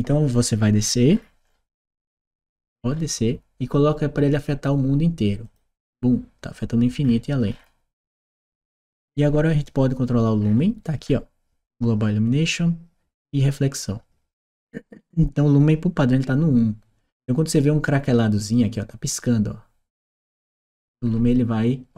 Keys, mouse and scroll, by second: 5.2 click, 6.8 middle click, 7.2-9.0 middle drag, 10.2-12.1 middle drag, 14.9 click, 20.9 middle click.